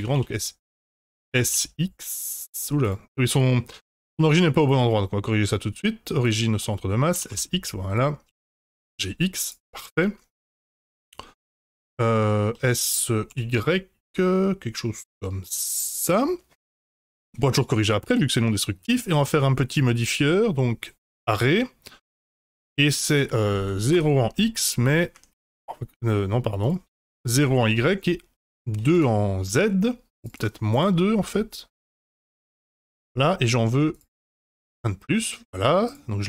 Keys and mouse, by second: 1.2 s, 3.2 middle drag, 4.5-6.3 right drag, 7.1 s, 8.2 g, 9.7-11.2 middle drag, 11.4-11.9 shift+middle drag, 12.5 s, 18.8 click, 19.6-24.1 drag, 24.9-26.1 drag, 26.6-27.7 drag, 28.5-29.6 drag, 30.2 click, 30.8-33.0 drag, 33.9 click, 34.5-35.5 middle drag, 35.8 click.